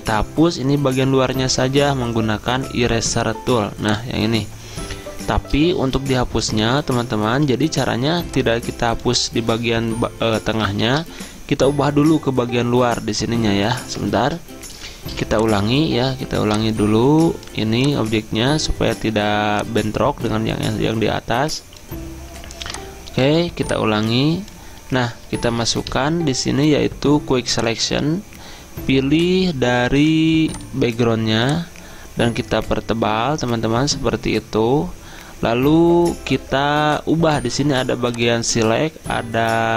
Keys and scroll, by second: 7.0 typing, 10.9 ctrl+z, 14.3 ctrl+d, 15.2 v, 25.6 Return.